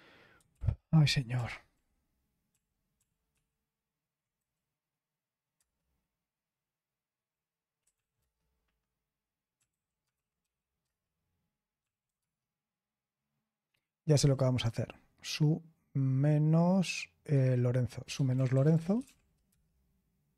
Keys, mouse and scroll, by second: 0.5 ctrl+p, 0.7 ctrl+p, 1.3 ctrl+p, 1.7 ctrl+p, 2.5 ctrl+p, 3.3 ctrl+p, 5.5 Return, 7.6-10.9 typing, 12.0 s, 14.1 typing, 17.3-19.5 typing.